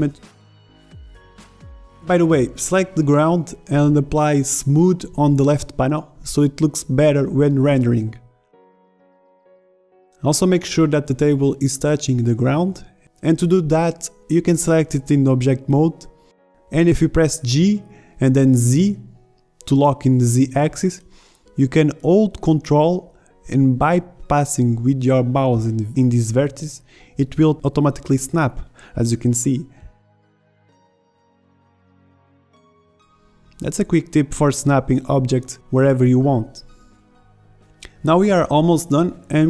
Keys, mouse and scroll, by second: 6.7-10.3 drag, 10.3 z, 15.9 g, 35.5 ctrl+shift+Tab.